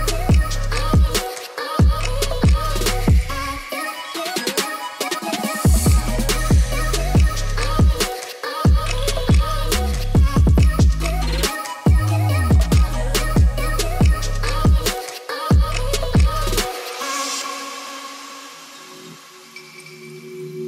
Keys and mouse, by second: 0.2 click, 1.7-2.8 drag, 3.4 Tab, 3.5 click, 4.8 w, 5.4 w, 5.7 click, 8.7 middle click, 9.6 shift+middle drag, 10.3 g, 10.8 z, 17.3 click, 17.4 Tab, 17.5-18.2 drag, 18.3 Tab, 18.5 click, 19.0 Tab, 19.1 Tab, 19.3 click, 20.0-20.5 drag, 20.6 Tab.